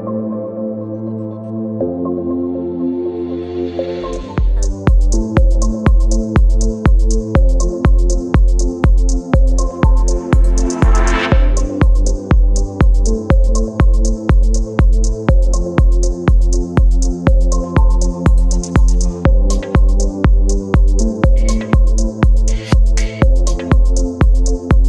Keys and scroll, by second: 4.0 space, 9.4 e, 10.4 [, 12.9 space, 15.3 space, 16.6 b, 18.6 v.